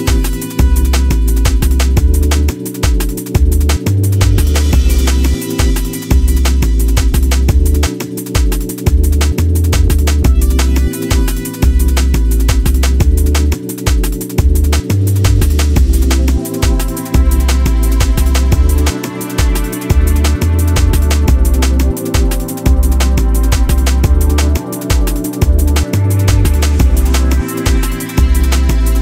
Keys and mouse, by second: 4.1 space, 7.0 click, 7.5 shift+click, 8.4-8.8 drag, 9.6-10.4 drag, 13.0-14.4 drag, 15.4-16.1 drag, 17.3 space, 18.3-19.3 drag, 19.6 space, 20.9 click, 21.3 ctrl+Tab, 24.9 click, 26.4 click, 27.5 f, 27.9 click, 28.2 alt+click.